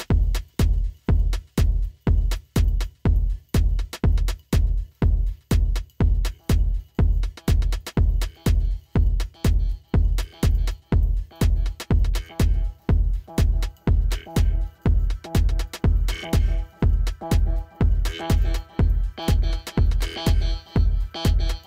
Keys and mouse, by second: 3.1 t, 4.2 click, 5.1 Return, 5.9 click, 14.7 click, 16.2 Down.